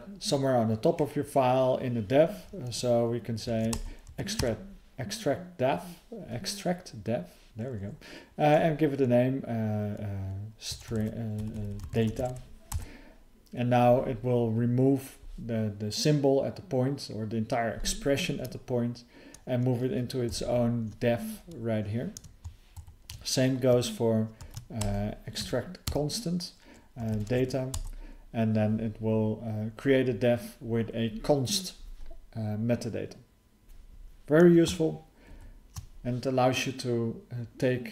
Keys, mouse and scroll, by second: 22.7 ctrl+_, 35.3 ctrl+_.